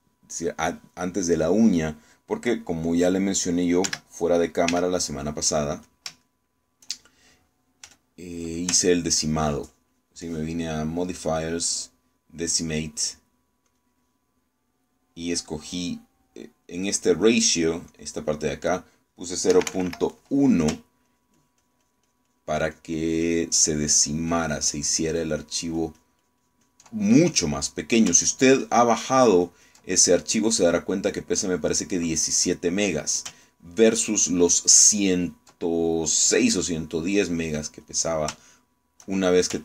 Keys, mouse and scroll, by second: 3.0 click, 4.9 3, 5.8 f, 6.9 click, 7.3 shift+middle click, 8.9 f, 9.5 ctrl+click, 10.0-11.3 ctrl+drag, 12.0 click, 14.8 click, 19.0 click, 20.6 Escape, 22.2-28.0 ctrl+drag, 28.2 ctrl+click, 29.3-31.0 ctrl+drag, 31.0-32.1 ctrl+drag, 32.2 click, 34.5-36.6 ctrl+drag, 37.2 click, 37.6 click, 38.4 click, 39.5 shift+middle click.